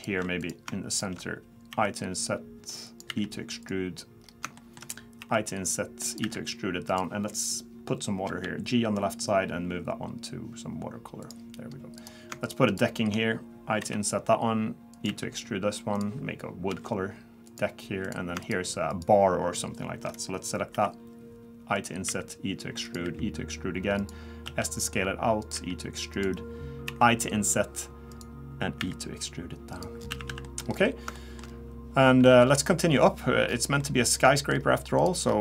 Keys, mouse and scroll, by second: 0.0 click, 0.4 click, 0.9 shift+click, 1.7 i, 3.1 e, 4.2 scroll up 2, 4.6 shift+middle click, 5.2 i, 6.2 e, 8.3 g, 12.0 click, 12.4 shift+click, 12.7 shift+click, 13.8 i, 15.1 e, 16.7 g, 18.0 click, 18.4 shift+click, 18.9 shift+click, 20.7 i, 22.1 e, 23.0 e, 24.5 s, 25.5 e, 26.8 i, 28.8 e, 30.0-30.3 scroll down 3, 30.1 a, 30.3 a, 30.4 middle click, 30.7-31.2 scroll up 4, 31.2 shift+middle click, 31.5 scroll down 1, 32.2-32.8 scroll down 3, 32.3 middle click, 32.8 middle click, 33.5-34.1 scroll down 4, 33.8 middle click, 34.6-35.4 scroll up 4, 35.0 click.